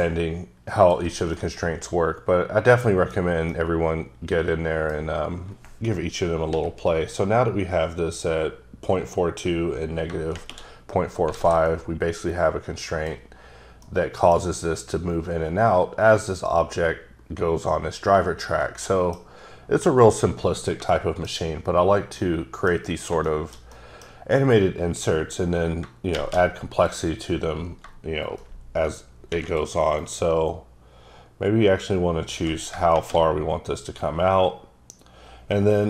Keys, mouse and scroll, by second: 1.4 middle click, 3.2 scroll down 1, 3.5 middle click, 6.5 n, 11.4 alt+a, 11.7-13.3 middle drag, 13.9 middle click, 18.6 middle click, 22.0 middle click, 22.3 middle click, 22.9 scroll up 5, 23.3 shift+middle click, 26.8 click, 30.0 click.